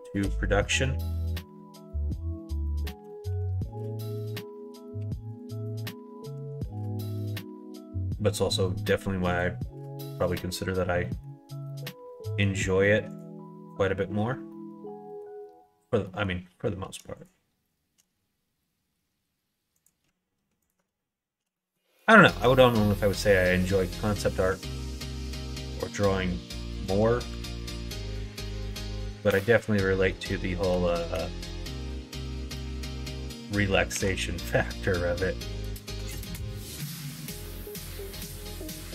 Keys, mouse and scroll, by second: 2.9 s, 4.5 middle click, 4.5 scroll up 1, 4.7 scroll down 1, 5.0 2, 5.3 click, 5.6 middle click, 6.6 ctrl+b, 10.2 click, 11.0 middle click, 11.6 middle click, 12.3 middle click, 13.1 click, 14.5 middle click, 16.0 middle click, 17.2 shift+click, 19.7 click, 20.6 ctrl+click, 21.6 middle click, 22.2 shift+click, 22.5 middle click, 23.7 ctrl+click, 24.2 click, 24.6 ctrl+e, 26.8 click, 27.4 ctrl+r, 28.7 middle click, 29.2 2, 30.0 click, 31.7 click, 32.9 alt+click, 33.9 ctrl+f, 35.1 middle click, 36.2 click, 36.8 shift+click, 38.3 f.